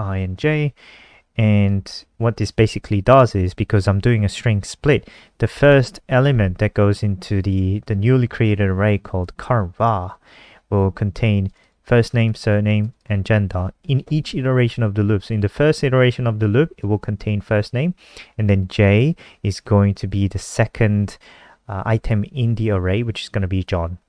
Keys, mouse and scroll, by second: 0.8 shift+Right, 1.1 i, 1.4 ctrl+Right, 1.5 ctrl+Right, 1.7 ctrl+Right, 3.3 j, 5.9 click, 12.0 click, 12.5 click, 12.7 click, 13.2 click, 13.4 click, 16.1 click.